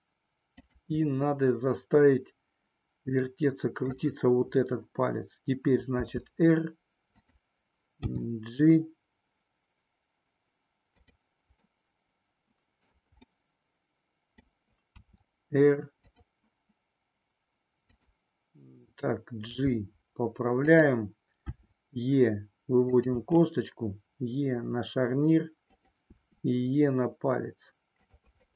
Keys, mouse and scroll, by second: 0.7 click, 1.3-3.9 middle drag, 5.9 r, 7.9 g, 11.7-12.8 middle drag, 11.7-12.8 scroll up 1, 13.4 scroll up 1, 13.4-14.6 middle drag, 14.8 r, 17.8 click, 19.4 g, 20.8 click, 21.4 e, 22.8 click, 23.2 e, 25.7 click, 26.1 e, 27.9 click.